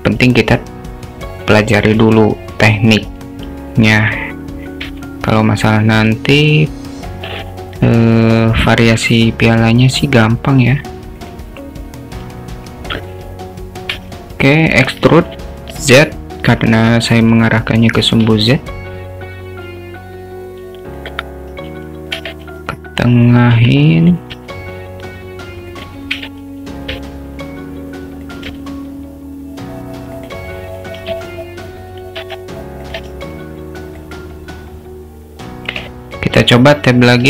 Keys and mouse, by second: 1.9 Tab, 4.9 e, 9.9 s, 13.9 e, 18.2 s, 22.2 e, 24.4 s, 26.2 e, 28.3 s, 31.0 e, 33.0 s.